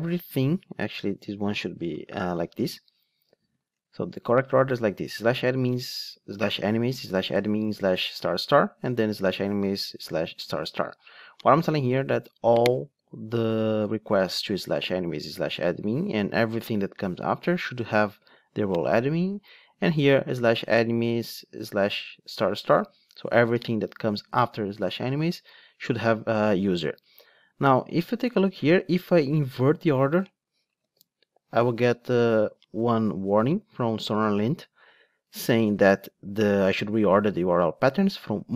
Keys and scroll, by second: 3.8 alt+shift+Down, 30.7 alt+shift+Up.